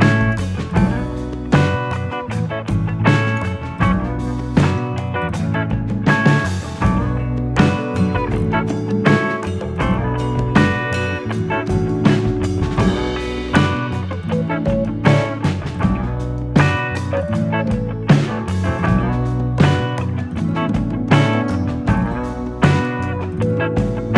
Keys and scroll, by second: 10.7-11.8 typing.